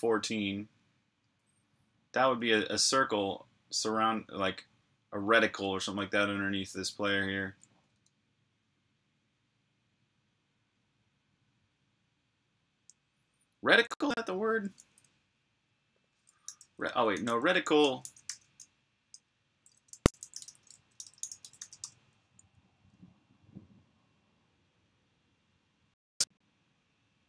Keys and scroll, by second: 7.8 super+Tab, 16.3 super+t, 17.1-19.5 typing, 20.9 typing.